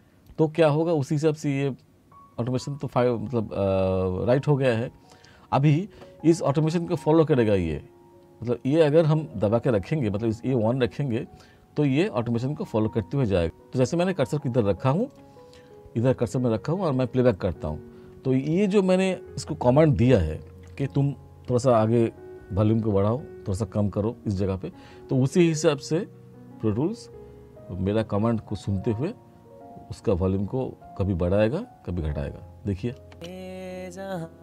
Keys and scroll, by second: 33.2 space.